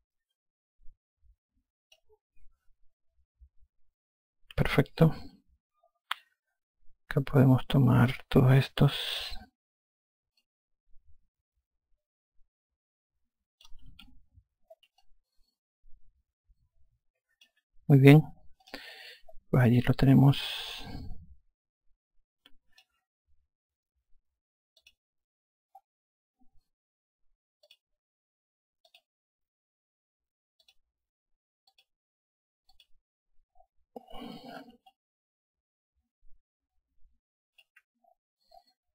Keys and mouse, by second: 5.0 click, 8.5 click, 10.8 click, 14.3 F1, 15.4 alt+click, 19.0 click, 20.1 alt+click, 25.2 click, 28.0 click, 29.3 click, 31.0 click, 35.3 alt+click.